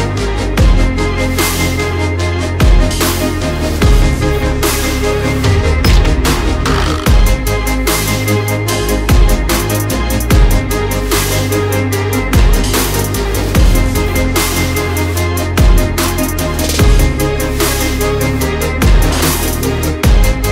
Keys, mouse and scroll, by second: 0.0-2.2 typing, 3.1 click, 4.7 click, 7.5 4, 7.7 0, 9.0 shift+5, 9.3 Return, 9.9 o, 10.2 f, 10.3 f, 10.7 click, 10.8 alt+scroll up 1, 11.3 click, 14.8 alt+scroll down 1, 16.0 click, 20.0 alt+scroll down 1.